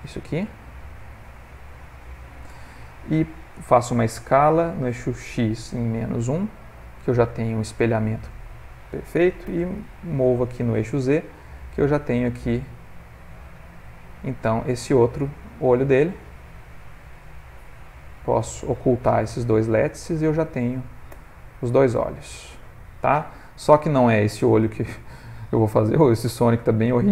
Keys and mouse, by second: 0.0 shift+d, 5.2 s, 9.5 g, 14.5 click, 15.3 ctrl+middle click, 15.6 middle click, 16.8 middle click, 16.9 ctrl+middle click, 17.3 click, 18.0 shift+click, 19.3 click, 20.0 shift+click, 21.1 h, 21.4 middle click, 26.3 ctrl+middle click, 26.7 middle click, 26.7 middle click, 26.8-27.1 ctrl+middle click, 26.9 middle click, 27.0 ctrl+middle click.